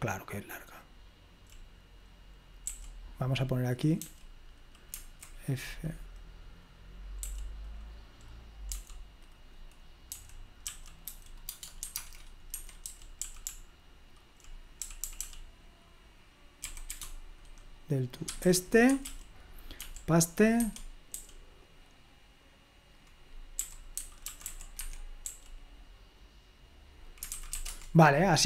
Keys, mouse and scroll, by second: 0.0-1.4 typing, 2.7 k, 4.0 j, 7.2 typing, 8.8 typing, 10.1-15.1 typing, 12.6 Escape, 16.6 typing, 18.0-19.9 typing, 18.9 Escape, 21.0 Escape, 21.2 j, 23.4-25.2 typing, 27.4-28.1 typing.